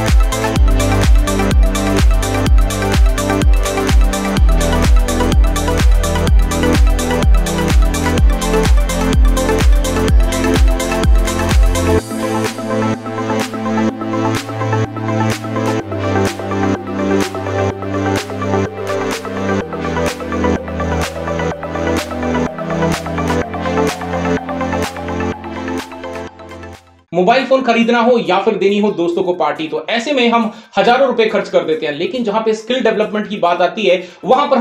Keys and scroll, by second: 3.4 ctrl+shift+g, 8.9 x.